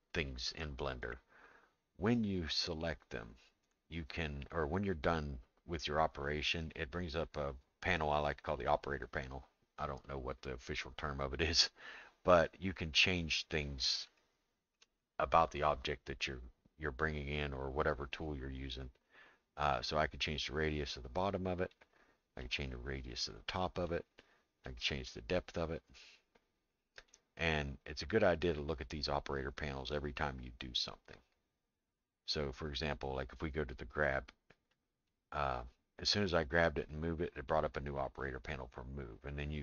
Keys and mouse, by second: 8.6 click, 14.2 shift+middle click, 19.7-21.8 drag, 22.4-23.9 drag, 24.6-27.2 drag, 32.8 click, 34.8 click, 39.3-39.6 drag.